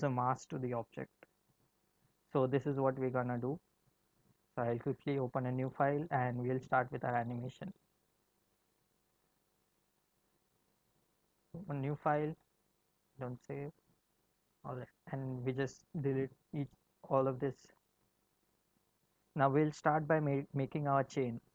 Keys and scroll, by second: 15.5 a, 17.9 Delete.